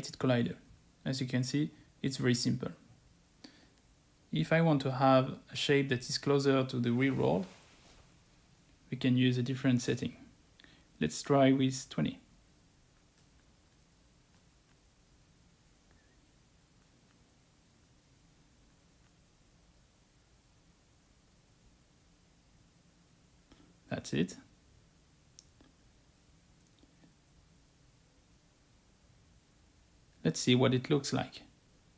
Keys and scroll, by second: 14.0-14.3 typing.